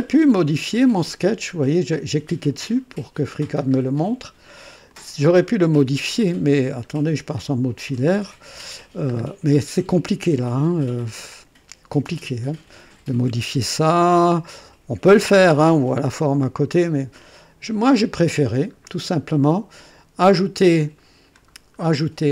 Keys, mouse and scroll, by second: 0.7 click, 4.9 click, 6.2-6.9 right drag, 8.1 &, 9.2-9.5 scroll up 1, 17.1 click, 18.7-19.1 scroll down 1, 21.5 scroll down 1.